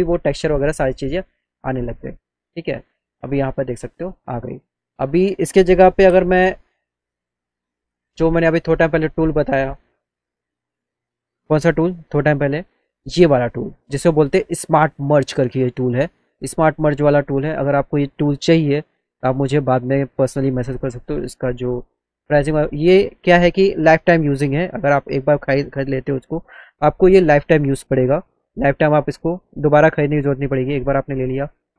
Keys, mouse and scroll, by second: 2.4 click, 6.8 click, 9.1 click, 10.8 click, 13.6 click, 19.2 click, 21.5-23.4 drag, 24.6 click, 25.4 click, 28.1 click, 30.4 click.